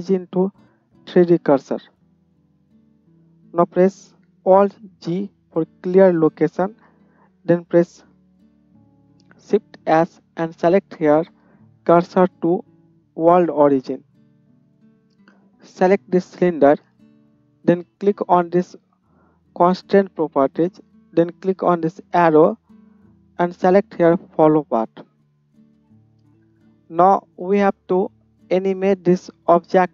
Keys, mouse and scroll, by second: 5.0 alt+g, 9.3-14.6 shift+drag, 9.7 shift+s, 14.6-18.3 right drag, 16.4-29.9 drag, 16.4-18.3 middle drag, 22.2-29.9 middle drag, 22.2-29.9 right drag.